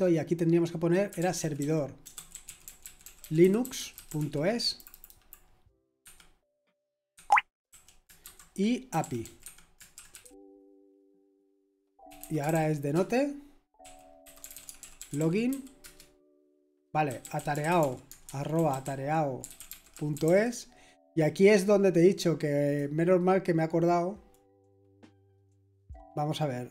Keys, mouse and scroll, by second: 0.8-4.6 typing, 4.7 Delete, 4.9 Delete, 5.0 Delete, 5.1 Delete, 6.0 Escape, 7.1 Escape, 7.4-9.9 typing, 12.1-20.7 typing, 22.6 click, 22.8-23.5 typing, 24.3 click.